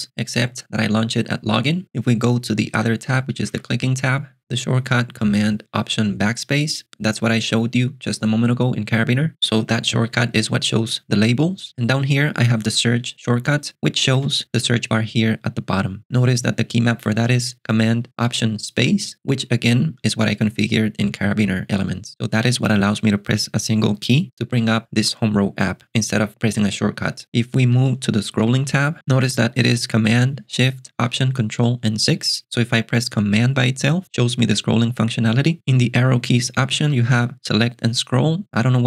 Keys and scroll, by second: 2.8 alt+super+BackSpace, 3.5 e, 10.5 alt+super+Delete, 14.2 alt+super+space, 27.7 alt+super+BackSpace, 28.4 e, 33.4 ctrl+alt+shift+super+6, 36.1 alt+super+BackSpace, 36.5-37.4 typing.